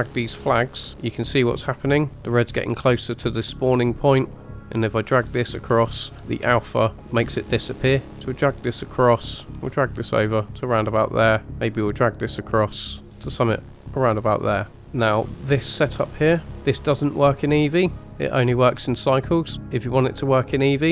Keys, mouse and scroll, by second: 3.6-5.9 drag, 8.0 click, 9.1-10.8 drag, 11.5-13.8 drag, 15.2 scroll down 2, 15.9-16.5 drag.